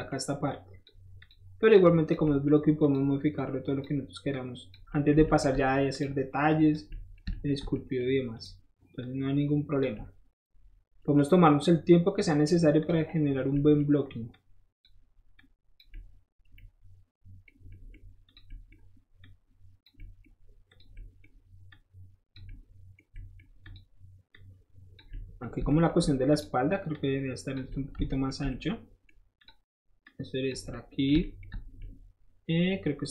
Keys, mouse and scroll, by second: 0.5 shift+click, 1.2 click, 1.7-2.1 drag, 2.2 middle click, 2.8 click, 3.4-3.8 drag, 4.3 click, 4.9 middle drag, 5.2 shift+middle drag, 5.9 shift+click, 6.5 shift+click, 6.9 shift+middle click, 7.2 shift+middle click, 7.5 shift+middle drag, 8.0-8.3 shift+middle drag, 8.3 shift+click, 8.4-9.0 shift+middle drag, 9.0-9.8 shift+drag, 9.8 middle click, 11.0 middle drag, 11.1-12.8 middle drag, 12.8 click, 13.1 middle click, 14.3 click, 15.4 click, 15.9 middle click, 17.7 middle click, 18.3 click, 18.5 middle click, 19.2 click, 20.0 middle click, 20.7 click, 20.9 middle click, 21.7 click, 22.4 middle click, 23.1 middle click, 23.6 click, 24.3 click, 25.1 middle click, 26.3 shift+click, 26.9 shift+click, 27.7 shift+middle click, 28.1 shift+middle click, 28.5 shift+middle click, 29.4 shift+click, 30.0 shift+click, 31.1-33.1 shift+middle drag.